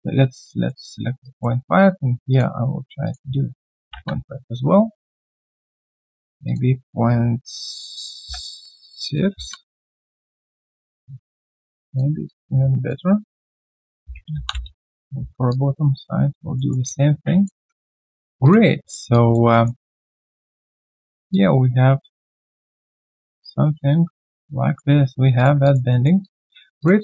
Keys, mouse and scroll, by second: 0.3 alt+click, 0.7 alt+middle click, 3.6-4.4 typing, 5.1 alt+click, 8.2 Tab, 8.9-9.8 typing, 13.8-14.8 typing, 15.1 Return, 15.5 alt+click, 16.5 alt+middle click, 16.8 alt+click, 17.7 right click, 18.8-19.1 alt+scroll down 1, 19.1 alt+click, 19.5 alt+middle click, 19.8 alt+click, 20.7 alt+middle click, 21.3 alt+click, 25.6 alt+click, 25.9 alt+middle click, 26.2 alt+click, 26.5 alt+right click.